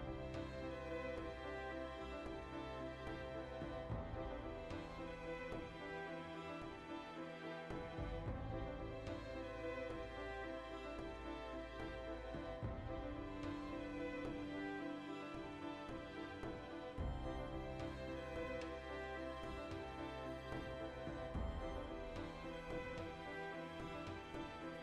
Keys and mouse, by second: 0.5 click, 0.8 right click, 1.3 g, 2.2 click, 2.2-6.0 middle drag, 6.1 shift+right click, 6.7 g, 7.4 click, 7.5 middle click, 7.7 right click, 7.9 g, 8.3 click, 8.5-10.6 middle drag, 10.6 right click, 10.7-12.2 middle drag, 11.7 g, 12.2 right click, 12.3 g, 12.7 click, 12.9 right click, 13.1 middle click, 13.6 g, 13.9 click, 14.0 shift+middle click, 14.8 right click, 14.9 g, 15.3 click, 15.4-16.6 middle drag, 16.6 alt+right click, 16.8-17.8 middle drag, 17.8 alt+right click, 18.6 shift+right click, 18.7-24.8 middle drag.